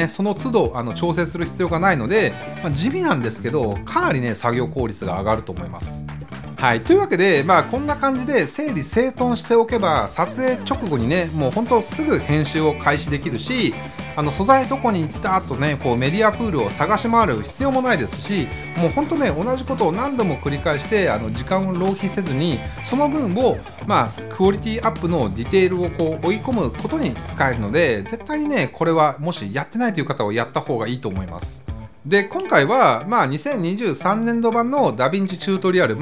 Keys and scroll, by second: 4.5 Return.